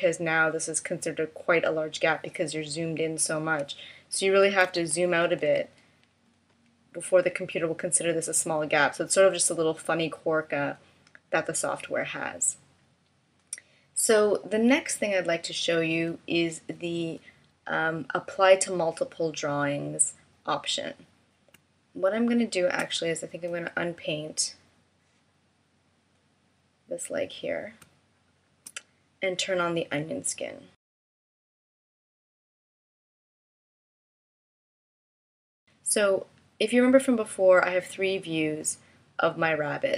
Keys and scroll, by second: 4.0 super+-, 21.0 space, 27.2 space.